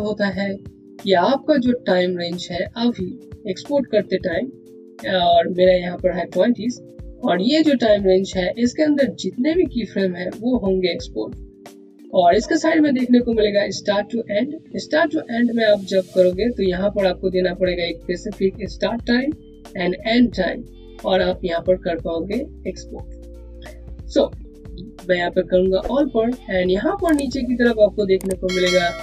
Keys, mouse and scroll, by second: 15.5 click, 25.3 click.